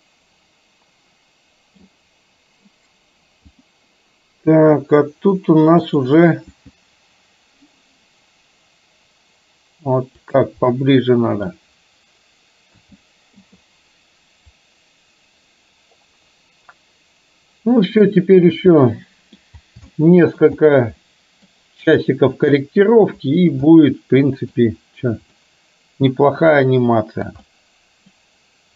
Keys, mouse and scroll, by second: 3.6 click, 5.9 click, 6.6 g, 10.9-11.5 middle drag, 12.7 a, 13.5 i, 14.6-18.1 drag, 18.9-19.4 middle drag, 20.0-20.5 shift+middle drag, 21.1-21.5 middle drag, 23.7-24.6 middle drag, 25.5-27.2 middle drag, 27.5-28.2 middle drag.